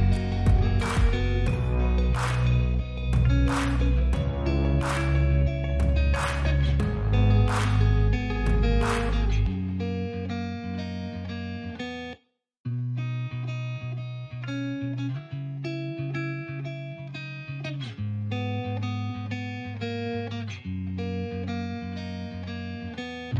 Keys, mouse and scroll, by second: 1.4 click, 4.9 space, 15.3 space.